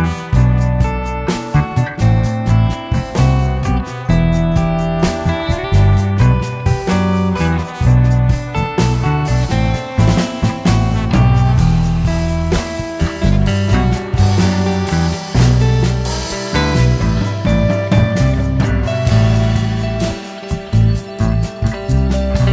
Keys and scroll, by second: 0.5 m, 0.5 space, 2.5 shift+Escape, 4.9 m, 5.0 space, 6.6 Escape, 6.7 Escape, 8.1 Escape, 8.8 m, 8.9 space, 12.0 Escape, 16.2 m, 16.4 space, 18.5 Escape, 20.0 Escape, 20.9 Escape.